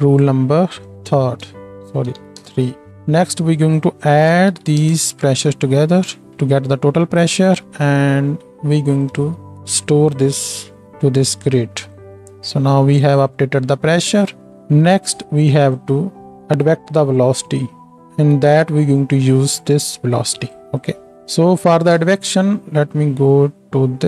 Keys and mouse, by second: 1.0 F2, 4.7 d, 6.1 click, 9.1 click, 9.4 shift+d, 10.5-13.3 drag, 10.8-13.3 middle drag, 10.8-13.3 right drag, 13.8 click, 13.8 middle click, 13.8 right click, 14.5 g, 15.8-16.1 drag, 16.1-21.7 middle drag, 16.1-22.0 right drag, 19.5-20.8 drag, 22.0 ctrl+space, 22.0-24.0 ctrl+drag.